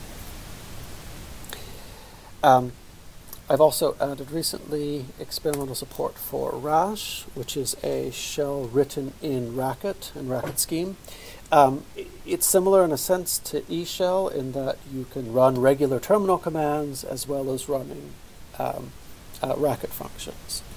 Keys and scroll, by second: 4.0-5.0 typing, 5.6 Return.